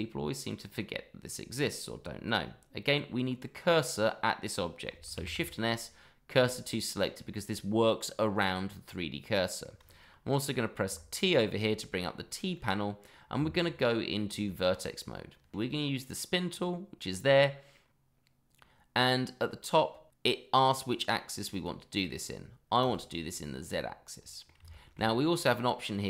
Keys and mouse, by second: 3.4-3.9 middle drag, 5.1 shift+s, 8.8 middle click, 10.8 t, 12.5-13.1 middle drag, 13.4 Tab, 15.9-16.4 middle drag, 16.5 click, 17.4-19.0 middle drag, 20.8 click, 21.5 click, 22.8 click, 23.7-24.4 middle drag, 24.7 shift+middle drag, 25.1-25.6 middle drag.